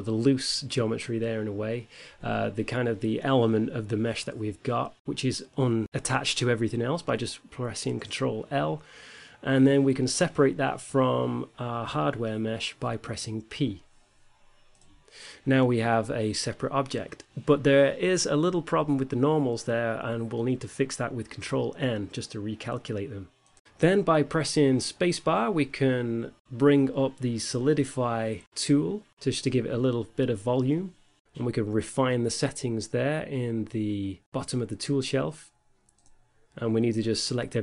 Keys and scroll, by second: 8.7 ctrl+l, 13.3 p, 14.3 Tab, 20.5 a, 21.3 ctrl+n, 24.5 space, 25.6-27.5 typing, 37.4 a.